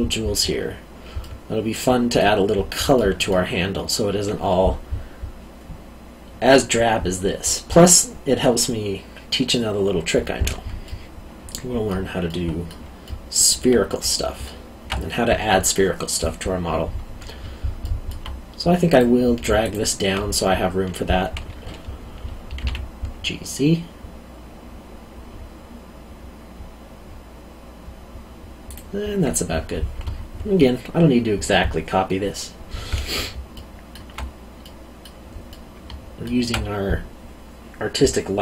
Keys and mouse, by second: 1.2 middle click, 10.8 middle click, 13.0 alt+middle click, 17.8 alt+middle click, 18.9 click, 19.6 alt+click, 22.5 g, 22.6 z, 28.7 click, 33.5 alt+middle click.